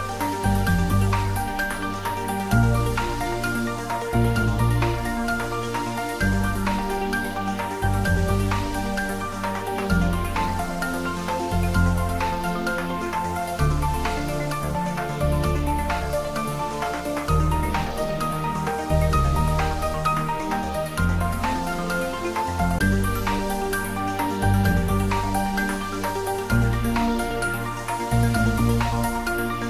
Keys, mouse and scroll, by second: 2.3 Tab, 4.7-6.2 middle drag, 6.2 Tab, 6.8-7.2 scroll down 1, 7.2 middle click, 7.9 scroll down 1, 8.7 middle click, 10.6 click, 11.8 3, 12.6-13.5 scroll down 1, 14.0 ctrl+r, 16.2 click, 22.3 click, 22.9-23.2 scroll up 1, 23.2 middle click, 24.1 ctrl+r, 25.4 click, 26.9 middle click, 27.4 scroll down 1, 28.9 ctrl+r.